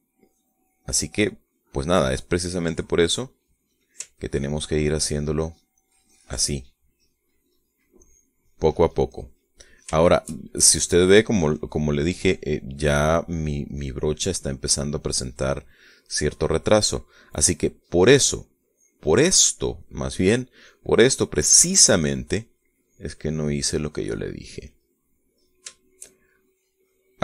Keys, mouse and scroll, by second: 0.2 ctrl+click, 0.6-3.6 ctrl+drag, 3.7-4.7 ctrl+middle drag, 5.2-7.3 ctrl+drag, 8.2 ctrl+middle click, 8.9-10.7 drag, 10.7 shift+middle click, 10.8 shift+click, 10.9-11.9 shift+middle drag, 12.5 middle click, 13.7-15.3 drag, 15.6 click, 16.3 click, 16.3 middle click, 17.0-18.3 drag, 18.3 middle click, 18.3-18.9 scroll up 1, 19.1-22.3 drag, 22.4-24.8 drag, 24.9-27.2 middle drag.